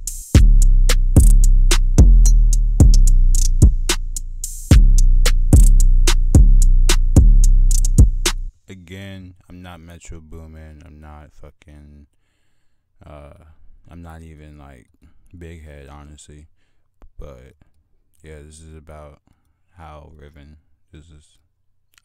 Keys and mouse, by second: 0.6 click, 0.9 click, 1.6 click, 1.8-2.2 drag, 4.8-6.2 drag, 7.6 click, 8.8 F1, 8.8 drag, 9.8 click, 10.3 F1, 11.1 drag, 11.2-12.9 drag, 13.9 click, 20.0-20.6 drag.